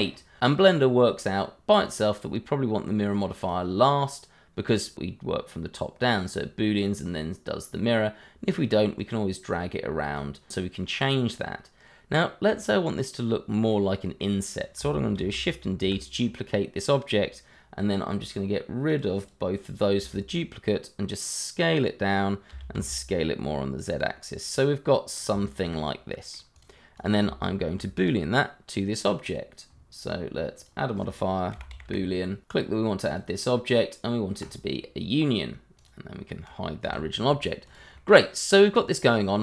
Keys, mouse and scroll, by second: 0.7 middle click, 1.4 scroll down 1, 3.4 click, 8.4 click, 10.8 middle click, 12.5 scroll up 1, 13.7 middle click, 14.2 middle click, 15.1 shift+d, 15.8 Escape, 18.8 click, 19.3 double click, 19.9 s, 22.0 click, 22.5 s, 22.7 z, 23.9 click, 24.2 middle click, 25.5 shift+middle click, 25.9 middle click, 26.6 click, 27.0 double click, 27.9 click, 30.5 click, 31.5 b, 31.7 o, 32.4 click, 32.7 click, 36.8 h, 37.3 scroll down 1, 37.6 click, 37.9 middle click.